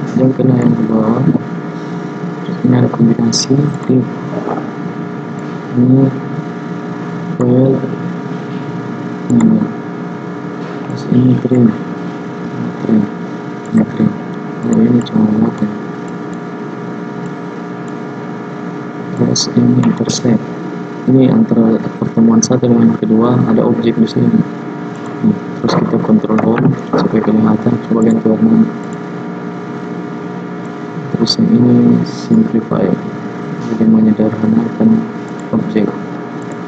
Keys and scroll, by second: 26.5 ctrl+Home.